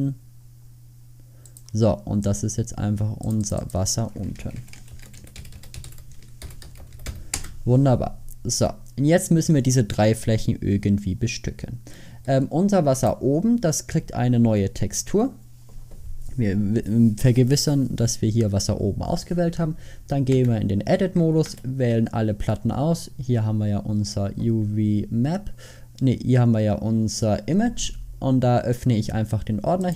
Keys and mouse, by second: 5.6 s, 13.1-14.9 middle drag, 20.4 Tab, 21.5 a, 29.9 middle click.